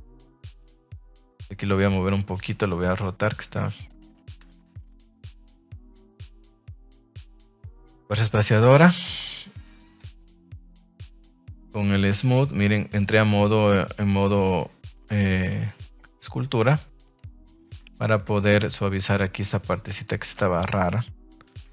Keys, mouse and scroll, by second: 0.3 click, 1.0 alt+right click, 1.4 r, 2.2 click, 2.4 g, 4.4 Tab, 4.8-6.1 middle drag, 6.8-7.1 middle drag, 8.0 KP_Divide, 8.6 ctrl+s, 8.8 shift+middle drag, 9.2 ctrl+Tab, 10.1 shift+click, 10.4 shift+click, 14.2-15.2 middle drag, 16.6-17.1 drag, 17.5 middle click, 17.8 Tab, 18.0 middle click, 18.3 shift+middle click, 19.8 alt+right click, 20.3 middle click.